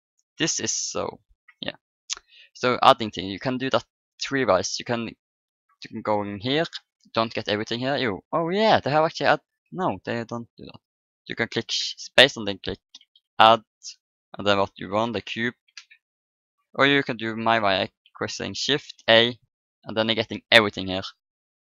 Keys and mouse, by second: 5.5-7.4 drag, 7.5 middle click, 8.3-10.6 drag, 10.6 middle click, 11.8 space, 13.3 d, 18.9 shift+a.